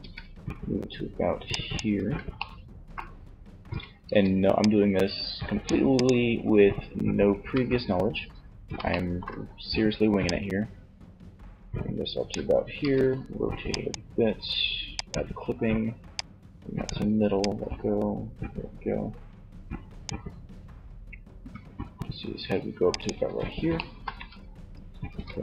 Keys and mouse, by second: 0.8 click, 2.7 a, 3.2 c, 5.3-7.0 right drag, 6.6 ctrl+z, 12.0 r, 14.2-18.4 drag, 20.6 g, 22.2 click, 24.3 ctrl+r.